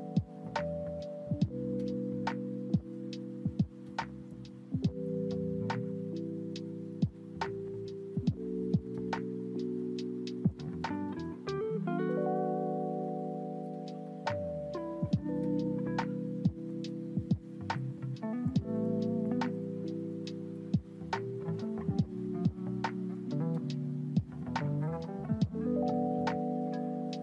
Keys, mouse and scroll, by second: 2.3-2.9 drag, 3.7 click, 4.4-5.5 scroll up 3, 5.5-7.8 scroll down 1, 7.8 click, 9.9-10.6 drag, 11.8 click, 12.9 click, 14.4 click, 15.6 click, 16.0 click, 17.9 click, 20.4-22.6 drag, 23.7-24.8 drag.